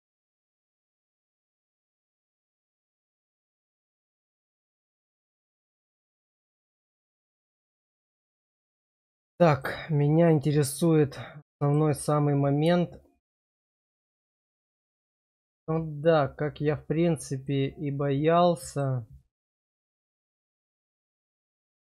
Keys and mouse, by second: 1.6 shift+click, 2.9 middle click, 4.2 shift+click, 5.3 middle click, 8.2 middle click, 9.3 shift+middle click, 10.0-11.7 middle drag, 13.4 shift+middle click, 17.4-18.8 middle drag.